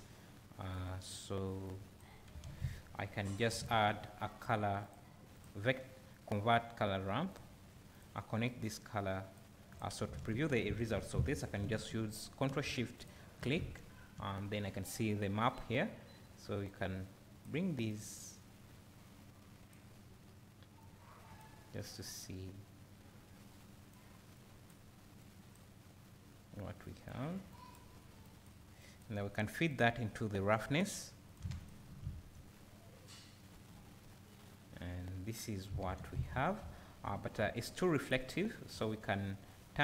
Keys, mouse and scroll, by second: 0.8 click, 1.7 click, 9.4-9.8 drag, 13.0 ctrl+shift+click, 14.2 `, 16.7-20.9 drag, 22.2-24.4 drag, 25.2 click, 26.8-27.6 drag, 28.2 click, 28.8 click, 30.6-31.3 drag, 38.3-39.8 scroll up 1.